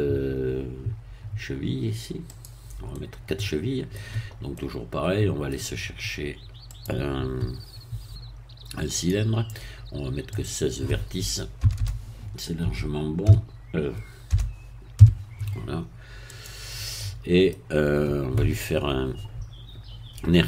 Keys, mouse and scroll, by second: 2.3 click, 2.9-4.1 middle drag, 4.5-5.7 middle drag, 6.7 click, 8.9 click, 10.3 click, 11.6 BackSpace, 12.6 KP_1, 13.5 KP_3, 14.3 BackSpace, 14.9 KP_6, 16.4 click, 17.0 middle click.